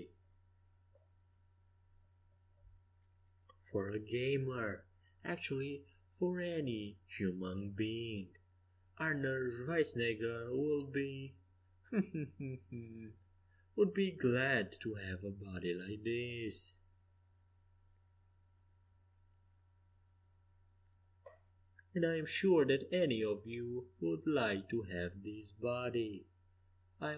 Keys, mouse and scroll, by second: 1.3 Tab, 8.2-9.6 middle drag, 15.6 Tab, 17.2 KP_5, 17.3 KP_1, 17.8 KP_3, 18.1 KP_5, 19.6 middle click, 19.7 z, 26.0 Tab, 26.5 Tab.